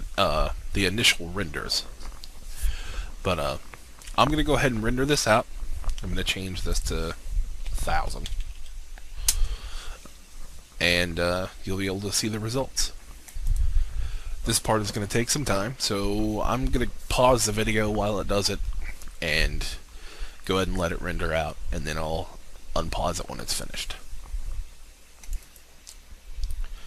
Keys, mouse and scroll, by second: 6.9 click, 8.2-8.7 typing, 9.4 Return, 13.4 click.